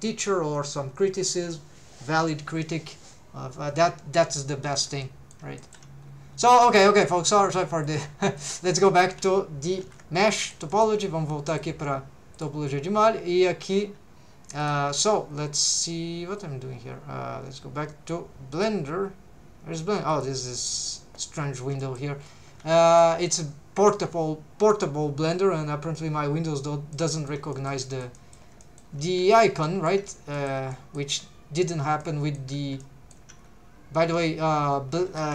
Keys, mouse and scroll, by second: 5.0 middle click, 5.6 shift+middle click, 6.0-6.4 scroll down 3, 7.5 click, 8.4 click, 8.7 click, 9.8 alt+h, 10.4 middle click, 10.7 shift+middle click, 21.8 middle click, 22.2 scroll up 2, 22.7 alt+a, 22.9 middle click, 23.2 shift+middle click, 26.9 middle click, 27.5 shift+middle click, 27.8 middle click, 28.1 middle click, 28.6 shift+middle click, 29.3 shift+middle click, 29.6 middle click, 30.0 scroll up 2, 30.3 shift+middle click, 30.7 middle click, 31.2-31.7 scroll up 2, 32.0 shift+middle click, 32.8 shift+middle click, 33.5 scroll down 1, 34.1 scroll up 1.